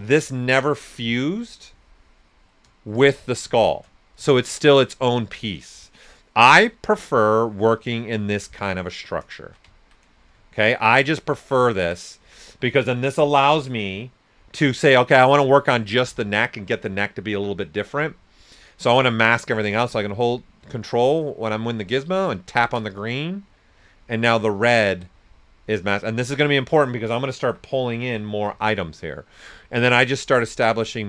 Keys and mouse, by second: 2.5 right click, 3.5 ctrl+shift+click, 3.9 shift+right click, 4.2-9.3 shift+drag, 9.7 ctrl+shift+right click, 19.4 w, 22.3 ctrl+click, 24.9 q, 25.2 right click, 27.2-29.0 typing, 28.5 click.